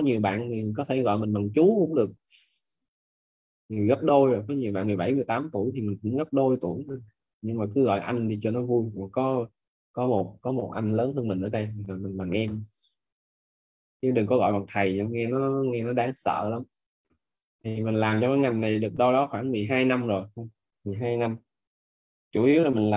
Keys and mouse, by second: 3.5 click, 13.8 click, 17.9 click.